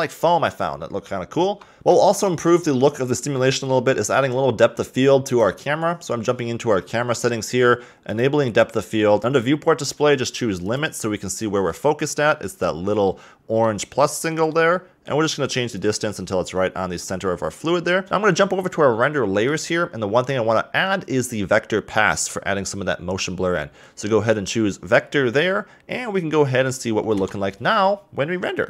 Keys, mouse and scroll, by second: 1.5 KP_0, 1.8-5.0 shift+middle drag, 5.3 click, 8.1 click, 9.2 click, 10.6 click, 11.7-15.7 middle drag, 15.7-18.1 drag, 19.4 click, 22.2 click, 27.5 F12.